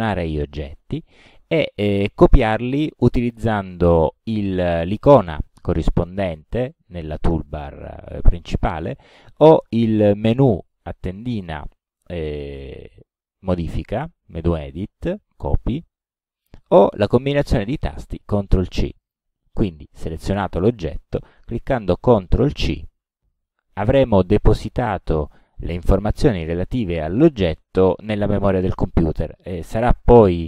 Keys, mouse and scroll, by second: 9.7 click, 19.1 click, 22.7 ctrl+c.